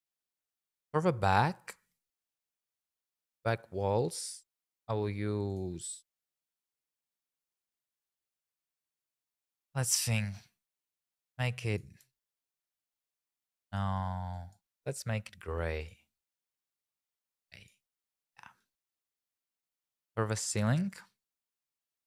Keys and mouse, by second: 0.4 click, 2.1 Tab, 2.9 alt+click, 5.8 click, 6.5 click, 6.8 click, 7.3 click, 8.2 click, 12.0 Tab, 13.7 click, 20.3 click, 20.6 Tab, 20.9 click, 21.4 click.